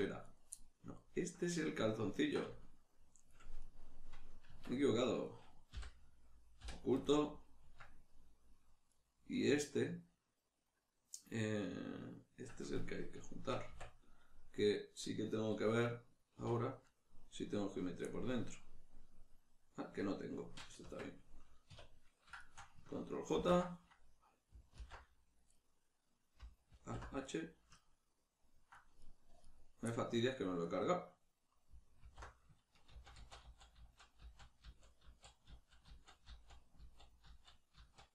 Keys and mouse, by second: 0.3 right click, 1.0-3.6 ctrl+middle drag, 3.6 right click, 4.5 Tab, 5.3 right click, 5.7 l, 8.9 right click, 14.6-22.4 middle drag, 16.4 \, 20.8 Tab, 21.7 \, 22.4 shift+right click, 23.3 ctrl+j, 25.5-27.3 middle drag, 26.7 alt+h, 27.3 right click, 27.8-29.0 ctrl+middle drag, 29.0 right click, 29.5 right click, 32.0 alt+h, 32.0-38.1 middle drag.